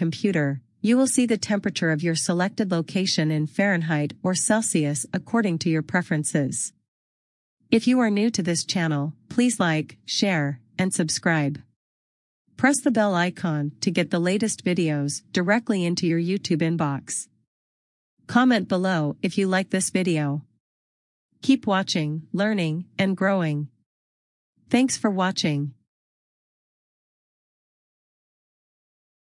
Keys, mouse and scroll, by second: 1.1 click, 15.0 click, 15.1-16.6 scroll down 1, 17.0-19.0 scroll down 1, 24.5 scroll down 1, 28.3 click.